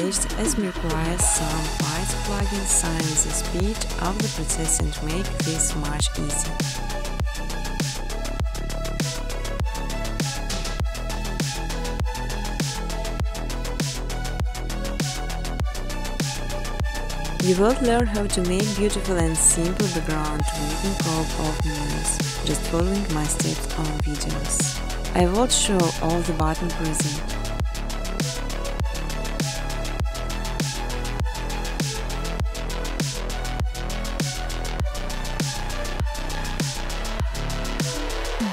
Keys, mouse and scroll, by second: 1.7 right click, 3.2 click, 3.7-5.2 typing, 6.7 click, 9.0-9.5 typing, 9.3 click, 10.3 click, 11.4 click, 12.2-13.4 typing, 13.7 Tab, 13.9 Tab, 14.3 Tab, 14.4-16.6 typing, 18.1 Tab, 18.3-24.8 typing, 26.1 Tab, 26.2-27.4 typing, 28.8-30.1 typing, 29.1 click, 31.8 click, 32.9 click, 33.7 8, 36.5 click, 37.3-38.4 typing.